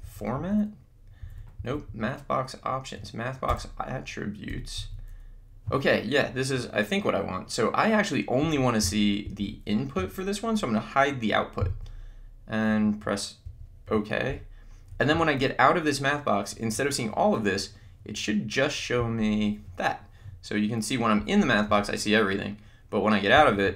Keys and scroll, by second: 0.1 Up, 0.5 Right, 1.3 Left, 1.7 Down, 2.1 Right, 3.5 Return, 19.0 Down, 21.2 Up, 23.3 Down.